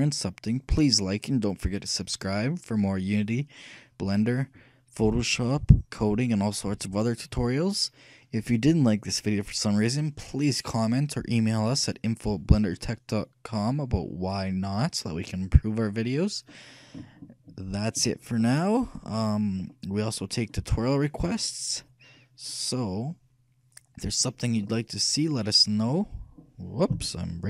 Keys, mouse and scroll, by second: 18.6-20.4 right drag, 20.5 right click.